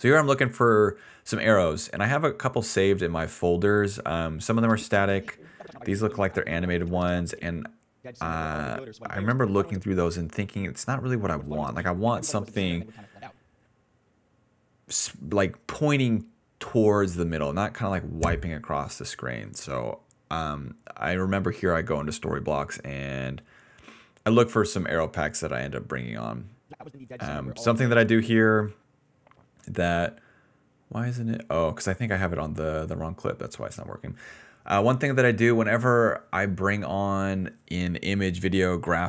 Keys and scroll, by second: 7.9 space, 8.7 d, 9.0 d, 9.8 space, 11.2 m, 11.3 space, 13.4 space, 21.8-22.8 typing, 26.7 space, 27.0 d, 28.0 space, 31.7 ctrl+c, 32.6 alt+v, 34.9 a, 36.1 a.